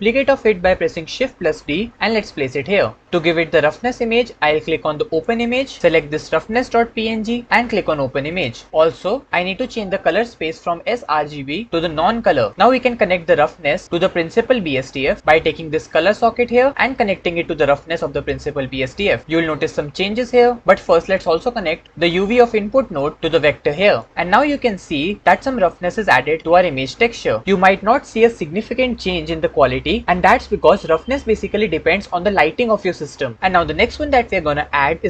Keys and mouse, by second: 1.3 shift+d, 4.9 click, 10.7-12.4 drag, 16.7-18.3 drag, 22.3-24.1 drag.